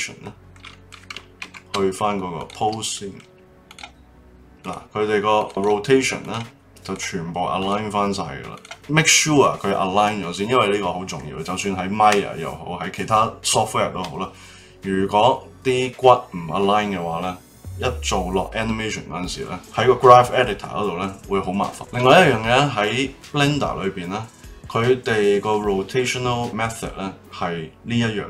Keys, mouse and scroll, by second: 0.2-1.4 middle drag, 1.4 ctrl+Tab, 2.9-3.6 middle drag, 3.6 click, 4.6 click, 5.3 click, 5.5 click, 6.2 click, 6.8 click, 7.6 click, 8.5 click, 8.7-9.8 middle drag, 21.7 click.